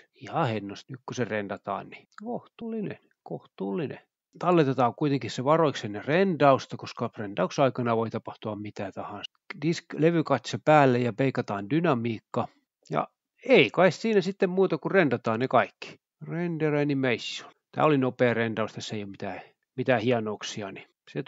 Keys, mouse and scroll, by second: 0.0 ctrl+alt+F12, 1.9 Escape, 3.6 click, 3.9 click, 4.4 click, 5.7 ctrl+s, 6.6 click, 7.2-7.6 scroll down 1, 9.6 click, 10.4 click, 11.5 click, 11.8 scroll down 2, 12.6-12.9 drag, 13.3 click, 16.1 F12, 18.7 Escape, 19.3 click, 20.7 click.